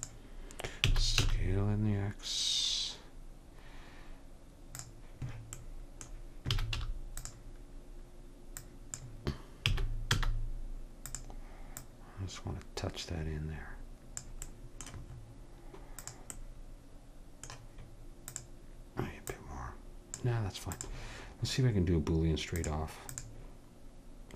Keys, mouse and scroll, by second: 0.8 s, 5.6 middle click, 6.6 s, 8.6-10.3 drag, 9.7 s, 13.1 click, 14.5 middle click, 14.8 middle click, 15.2-18.2 middle drag, 16.0-17.9 drag, 18.3-24.3 drag.